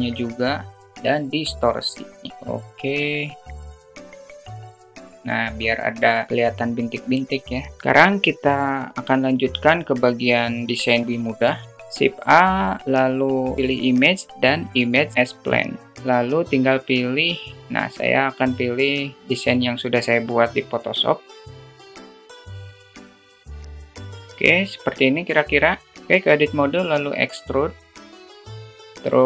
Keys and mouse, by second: 6.5 click, 11.9 shift+a, 18.7-19.5 middle drag, 21.2 g, 21.6 drag, 21.9 alt+middle click, 22.1 s, 22.5 `, 22.7 s, 23.2 click, 23.6 click, 23.9 s, 24.2 alt+middle click, 25.0 alt+middle click, 26.1 ctrl+alt+z, 26.1 alt+middle click, 27.3 e, 28.3 alt+middle click, 28.6 Tab, 28.9 alt+middle drag.